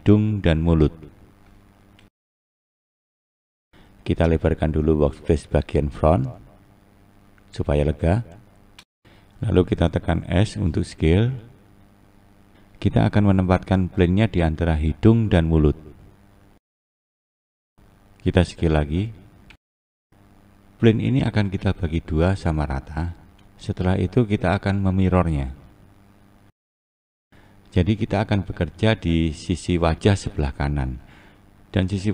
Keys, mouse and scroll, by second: 1.4-1.9 scroll down 5, 1.9-3.7 scroll up 7, 3.7-5.5 scroll down 1, 5.5-8.6 drag, 7.2-8.2 scroll up 3, 8.6-10.3 scroll up 2, 10.3 scroll up 1, 10.3 s, 13.6-14.9 scroll up 3, 14.9 click, 17.6 s, 20.5-21.3 scroll up 6, 22.1-22.9 scroll up 1, 22.9-25.0 scroll down 1, 25.0 click, 28.1 s.